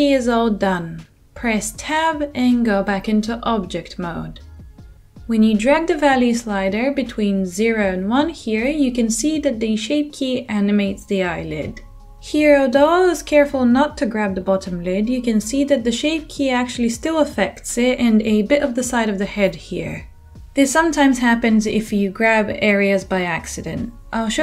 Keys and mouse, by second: 3.2 Tab.